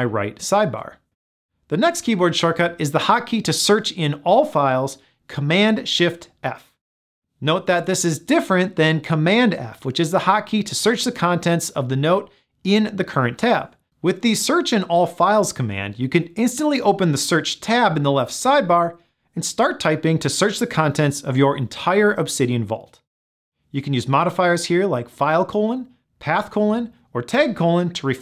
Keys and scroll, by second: 16.2 shift+super+f.